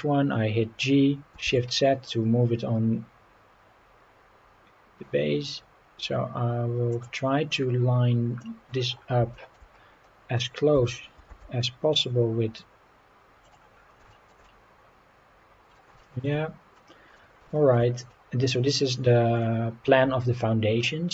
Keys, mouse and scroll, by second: 1.4 shift+z, 6.9-7.2 drag, 7.2-7.7 scroll up 3, 7.8 scroll down 2, 8.4 middle drag, 8.9 scroll up 2, 9.3 shift+middle drag, 9.7-10.2 scroll up 4, 10.7 g, 11.3 shift+z, 13.4 click, 13.7 scroll down 2, 14.1 shift+middle drag, 14.4-15.7 middle drag, 16.0 shift+middle drag, 16.7-17.1 middle drag, 17.5 shift+middle click, 18.1-18.5 middle drag, 19.4-20.8 middle drag.